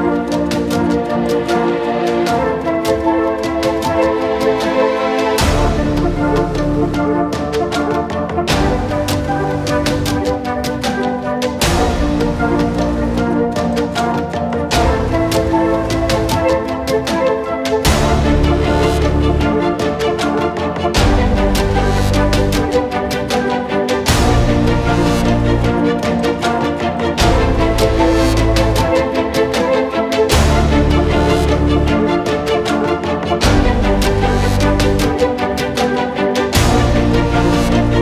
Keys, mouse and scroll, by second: 1.2 middle click, 1.4-3.8 typing, 1.5-1.9 scroll up 1, 1.9 alt+g, 3.3 middle click, 4.5 alt+click, 4.7 alt+middle click, 4.8 alt+click, 5.4 q, 5.5 g, 6.2 s, 7.2 scroll up 2, 7.3 s, 7.6 alt+middle click, 7.8 s, 8.4 alt+middle click, 8.8 n, 9.3 click, 11.4 middle click, 11.7 n, 11.7 middle click, 11.9 alt+g, 13.4-13.9 drag, 13.9 scroll up 2, 14.1 alt+middle click, 14.5 scroll down 5, 14.7 click, 15.0 g, 15.5 click, 15.6 middle click, 15.7 g, 16.4 g, 18.4 click, 18.6 middle click, 18.7 s, 21.7-22.0 scroll up 2, 22.0 click, 22.4 scroll down 10, 22.7-25.9 drag, 25.9 scroll down 1, 26.1 click, 26.3 g, 28.9 scroll down 3, 29.1 alt+middle click, 29.3 g, 30.5 click, 30.6 alt+middle click, 30.7 scroll up 1, 30.8 click, 31.0 g, 32.6 r, 32.9 g, 33.9 shift+click, 34.0-34.7 scroll up 1, 34.7 g, 35.7 alt+d, 35.9 r, 36.3 g, 37.1 alt+middle click, 37.3 alt+f, 37.5 middle click, 37.7 alt+d, 37.9 r.